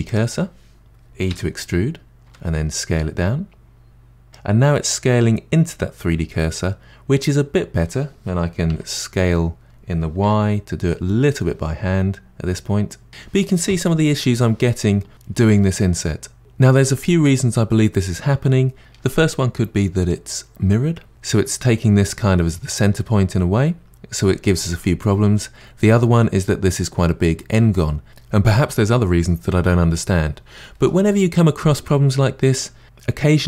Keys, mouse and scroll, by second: 1.3 e, 8.7 s.